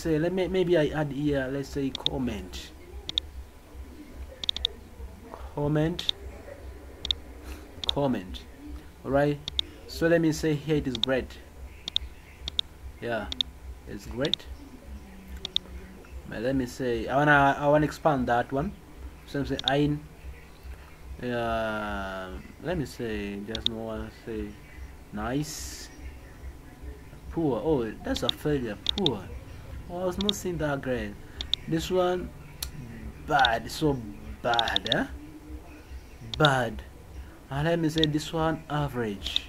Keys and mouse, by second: 1.9 click, 3.0 click, 4.4 click, 4.5 click, 4.7 click, 5.9 click, 7.0 click, 7.8 click, 11.0-11.3 drag, 11.8 click, 12.5 click, 13.3 click, 14.2 click, 15.4 click, 19.5 click, 23.5 click, 28.1 click, 28.8 click, 30.1 click, 31.4 click, 33.3 click, 34.5 click, 36.3 click, 37.9 click, 39.2 click.